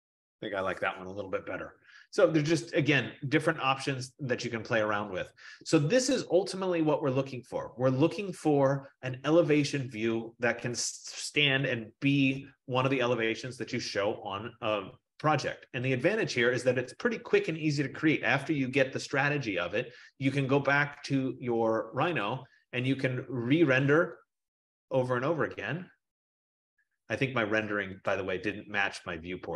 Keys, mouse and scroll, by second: 22.3 click, 24.6 click, 28.3 click.